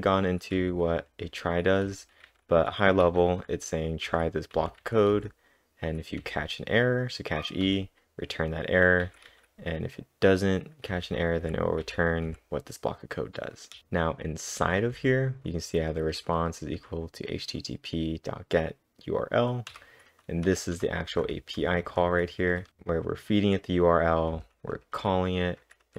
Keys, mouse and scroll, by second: 0.0-7.7 typing, 9.0 typing, 10.7-12.3 typing, 13.8-16.1 typing, 19.7 typing, 20.9-23.2 typing, 25.6-25.9 typing.